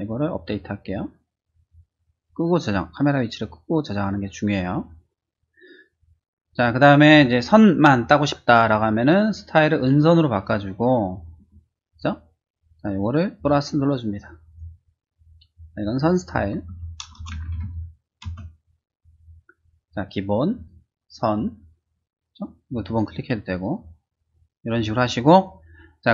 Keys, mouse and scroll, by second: 0.4 click, 1.6 click, 9.8 click, 13.3 click, 14.5 click, 15.5 click, 16.3-17.6 typing, 18.2 Return, 20.5 click, 21.2 click, 22.7 click, 22.8 click, 23.4 click, 23.6 click.